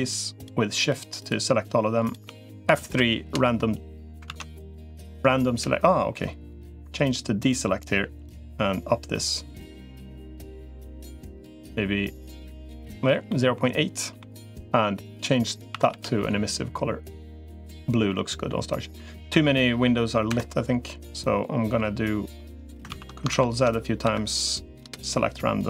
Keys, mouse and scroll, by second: 0.6 click, 1.0 click, 2.6 F3, 4.2 ctrl+z, 4.6 F3, 6.6 click, 8.0-12.6 drag, 13.1 middle click, 15.6 a, 15.8 g, 17.4 click, 20.8 middle click, 22.8 ctrl+z, 23.2 ctrl+z, 23.8 F3.